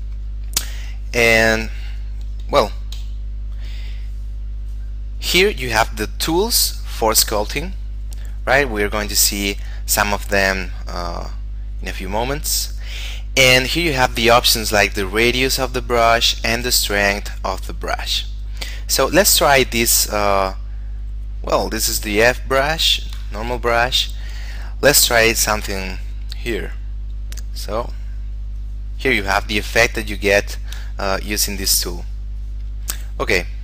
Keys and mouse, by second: 3.1 Delete, 5.3 click, 11.5 click, 14.9 click, 20.1 click, 27.0 click, 30.5 shift+middle click, 31.3 click, 33.4 shift+middle click.